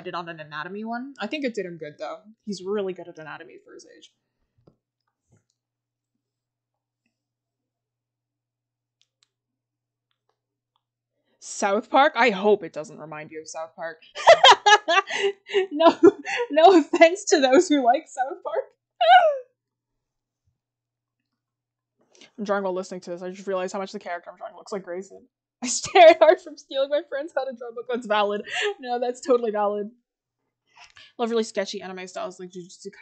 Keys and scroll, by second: 0.3 scroll down 1, 3.7 scroll up 1, 4.4 scroll, 12.8-13.3 scroll, 13.7 scroll, 22.0 scroll, 24.1-25.8 scroll.